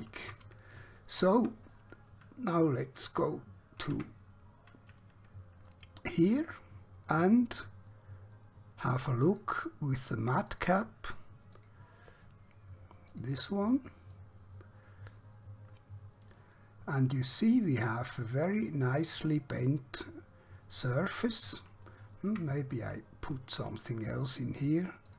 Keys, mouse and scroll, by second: 0.9 shift+middle click, 1.9 middle click, 4.1 Tab, 5.8 middle click, 9.3 click, 14.3 middle click, 22.4 Tab.